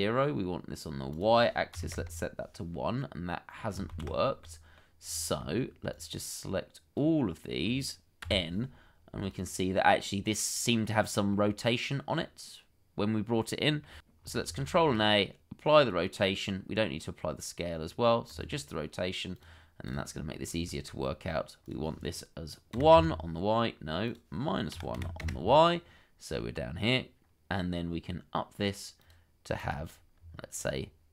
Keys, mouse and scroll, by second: 1.9 Return, 3.0 middle click, 3.9 ctrl+z, 4.4 middle click, 5.0-5.4 scroll down 1, 5.4 middle click, 9.0 n, 11.3 middle click, 14.5 ctrl+a, 20.2-20.6 scroll up 1, 20.7 shift+middle click, 22.7 1, 22.9 Return, 24.7 -, 24.9 1, 25.2 Return, 26.2 scroll up 1, 30.1-31.1 scroll down 1.